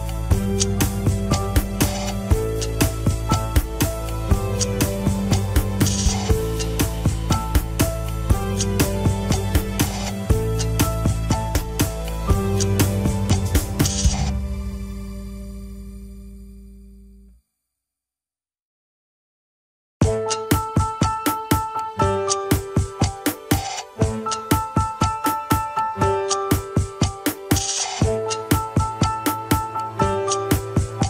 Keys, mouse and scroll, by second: 0.1 click, 0.5 click, 0.8 s, 1.7 click, 1.9 s, 2.8 click, 3.1 KP_1, 3.9 scroll down 2, 4.5 KP_7, 4.7 scroll up 2, 5.0 shift+middle click, 5.9 shift+click, 6.1 shift+click, 6.6 shift+click, 7.8 g, 8.8 click, 9.1 shift+click, 9.4 s, 10.9 KP_1, 11.5 r, 15.5 scroll down 3, 15.7 KP_7, 15.9-16.3 scroll up 1, 16.3 s, 17.6 click, 18.0 s, 18.8 click, 19.1 s, 19.9 click, 20.5 shift+click, 20.8 shift+click, 21.4 shift+n, 22.3 click, 22.7 shift+click, 23.1 shift+click, 23.9 shift+n, 24.6 shift+middle click, 25.4 click, 25.8 shift+click, 26.1 shift+click, 26.9 g, 27.9 click, 28.3 shift+click, 29.1 ctrl+KP_1, 29.6 alt+z, 29.9 r, 30.7 alt+z, 30.9 s.